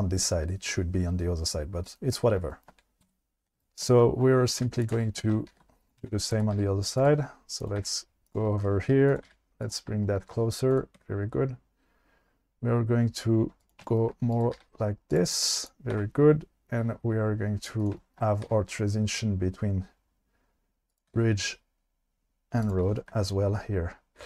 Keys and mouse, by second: 3.0 2, 4.6 2, 5.5 shift+d, 6.0 1, 6.5 g, 7.0 click, 7.6 click, 7.8 g, 8.3 click, 9.1 click, 9.2 g, 10.7 click, 11.0 e, 13.6 click, 14.5 g, 15.1 click, 15.6 click, 17.5 e, 18.4 e, 21.1 e, 22.6 click, 23.0 shift+middle click.